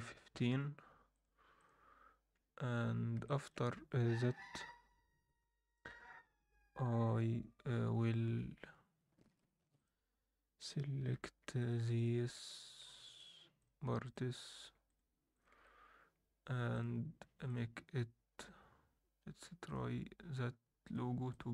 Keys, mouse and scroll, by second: 2.3 scroll up 1, 2.6 Tab, 2.9 scroll down 1, 3.2 alt+shift+middle click, 5.9 u, 8.3 scroll up 1, 8.9 scroll down 2, 9.2 scroll up 2, 9.7 click, 11.1 3, 11.6 click, 11.9 shift+click, 12.3 shift+click, 12.7 shift+click, 13.1 shift+click, 13.6 shift+click, 14.5 shift+click, 14.8 shift+click, 15.3 shift+click, 16.7 click, 17.4-19.7 drag, 20.8 click, 21.3-21.5 drag.